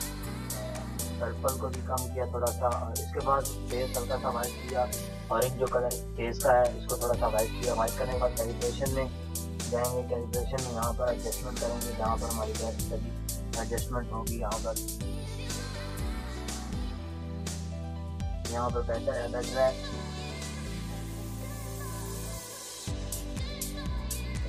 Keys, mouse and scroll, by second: 1.2 click, 1.8 click.